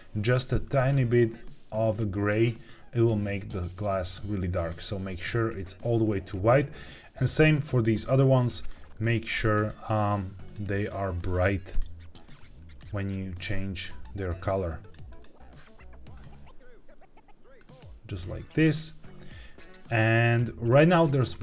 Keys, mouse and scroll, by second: 7.2 click, 7.4 click, 8.5 click, 10.4 click, 10.7 click, 11.6 click, 13.6 click, 13.8 click, 14.7 click, 15.0 click, 16.0 click.